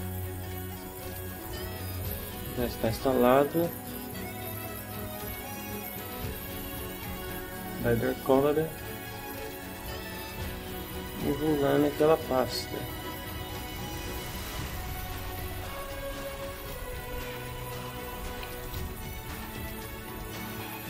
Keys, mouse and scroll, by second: 0.1 ctrl+alt+Right, 2.3 click, 8.8 click, 13.8 click, 15.0 click, 15.7-20.8 typing.